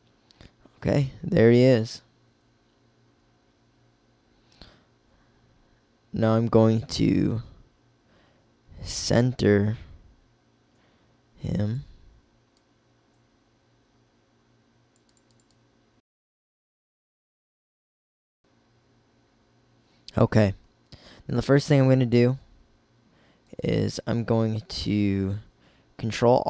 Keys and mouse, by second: 0.0 click, 0.7-4.7 middle drag, 4.7 click, 5.9-7.5 drag, 8.4 click, 13.9-15.7 middle drag, 15.7 click, 17.1 middle click, 18.4-20.8 middle drag, 20.8 Tab, 23.5-25.3 drag, 26.1 ctrl+r.